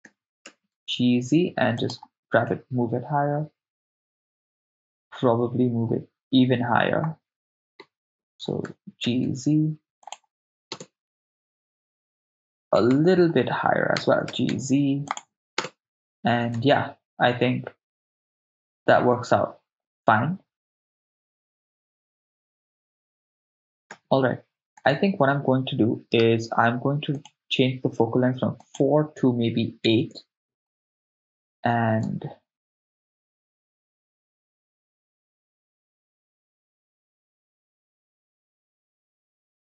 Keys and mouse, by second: 0.1 g, 0.4 z, 1.8 ctrl+click, 2.8 KP_0, 7.6 KP_0, 8.6 g, 9.0 z, 10.1 ctrl+click, 10.8 KP_0, 12.8 KP_0, 14.0 g, 14.3 z, 15.1 ctrl+click, 15.7 KP_0, 16.6 shift+space, 23.9 shift+space, 24.9 click, 24.9 right click, 27.1 click, 28.7-30.1 drag, 32.1 shift+space, 38.7 shift+space, 39.3 shift+space.